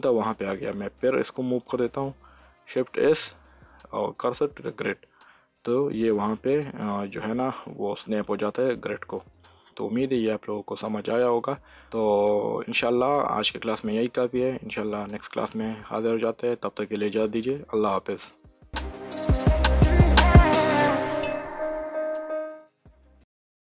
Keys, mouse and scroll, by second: 0.9 shift+s, 1.6 click, 2.9 shift+s, 4.6 shift+s, 8.5 shift+s, 8.6-12.1 middle drag.